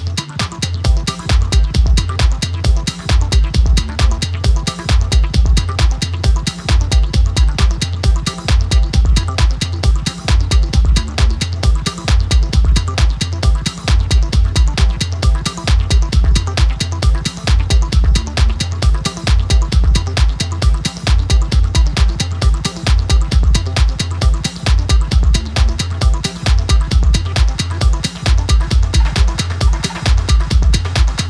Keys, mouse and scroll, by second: 0.2-0.5 alt+scroll up 1, 1.6 super+d, 2.8-6.4 click, 4.9 alt+Tab, 7.6-12.2 drag, 15.9 click, 16.0 super+d, 16.8 click, 19.2-20.0 drag, 24.4 right click, 26.6-30.0 drag.